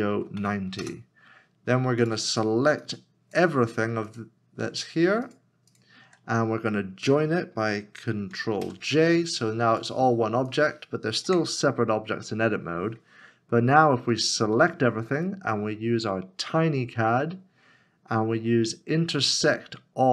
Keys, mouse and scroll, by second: 0.0 9, 0.8 Return, 5.3 shift+click, 8.6 ctrl+j, 11.3 Tab, 14.5 Tab, 15.2 a, 16.2 right click.